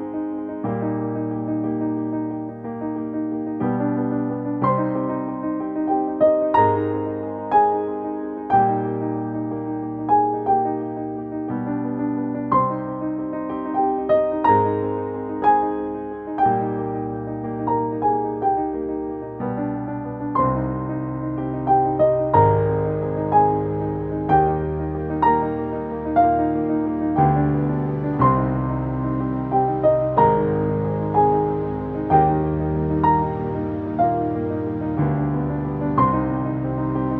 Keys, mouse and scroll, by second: 0.7-5.0 drag, 5.0 space, 5.2 ctrl+click, 6.3 a, 7.1-9.4 drag, 9.4 v, 9.9 click, 10.9 space, 11.0 click, 11.3 space, 14.1 click, 18.1 i, 18.9 click, 20.9 Down, 21.2 Return, 22.8 v, 23.4 click, 30.6 click, 32.0 shift+Up, 33.2-37.1 drag.